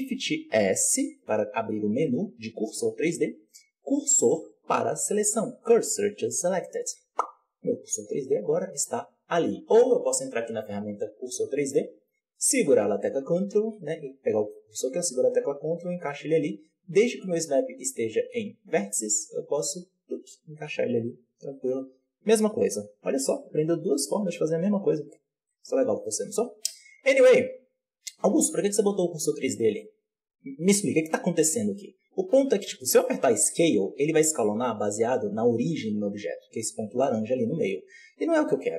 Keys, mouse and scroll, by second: 0.7 shift+s, 9.7-16.8 drag, 17.1-22.3 drag, 25.3 Tab, 26.9 right click, 32.2 s, 34.1-34.9 scroll down 3, 34.9 s, 37.3-38.4 scroll up 1, 38.4-38.7 scroll up 1.